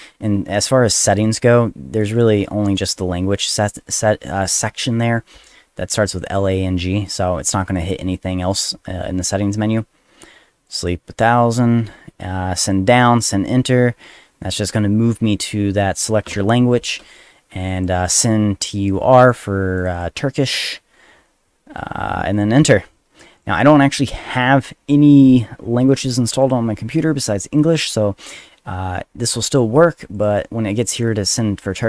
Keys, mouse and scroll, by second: 1.0 click, 1.2 click, 2.0 click, 2.1 click, 7.1 click, 7.7 click, 7.8 click, 10.7 click, 10.8 click, 12.6 click, 13.2 click, 17.6 click, 17.8 click, 19.8 click, 19.9 click, 22.3 click, 22.5 click, 23.4 click, 26.4 click, 30.1 click, 30.3 click, 30.7 click, 31.0 click.